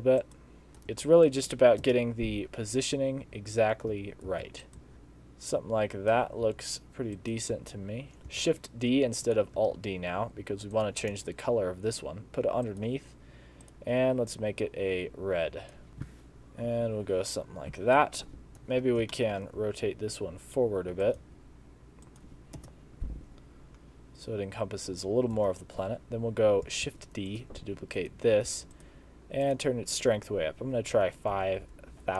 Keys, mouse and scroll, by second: 0.7 KP_3, 0.9 g, 1.9 KP_0, 4.3 alt+d, 4.9 r, 5.1 click, 6.5 r, 7.5 g, 8.5 shift+d, 9.6 r, 11.2 g, 13.7 click, 18.5 KP_3, 18.9 scroll down 3, 19.2 shift+middle click, 19.5 scroll up 1, 19.6 r, 21.3 g, 22.6 KP_0, 25.4 KP_3, 26.9 shift+d, 27.7 r, 28.6 g, 29.5 click, 31.7 0.